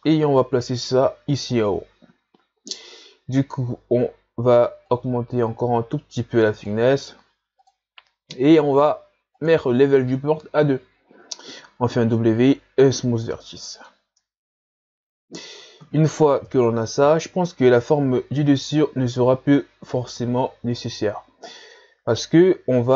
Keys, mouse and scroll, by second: 4.9-11.6 drag, 11.6 w, 13.0-13.3 scroll down 1, 13.3-16.4 middle drag, 16.4 KP_1, 17.4-18.8 scroll up 5, 18.8 scroll up 1, 18.9-20.1 scroll down 1, 20.1-21.0 scroll down 5, 21.0-22.9 scroll up 2.